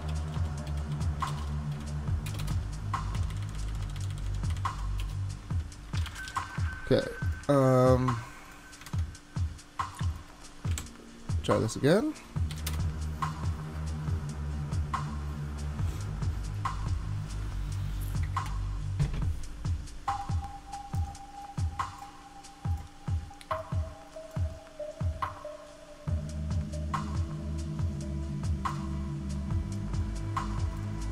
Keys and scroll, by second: 0.0-6.7 typing, 3.8 Left, 5.5 Right, 8.9 super+Tab, 10.7 super+s, 12.7 shift+Return, 21.0 shift+Return.